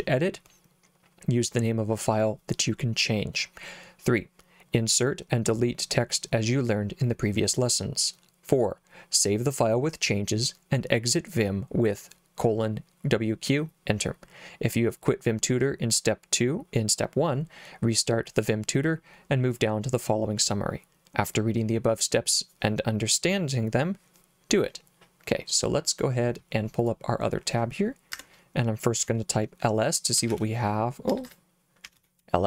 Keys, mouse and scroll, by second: 26.9 click, 28.2 Escape, 30.0-32.4 typing.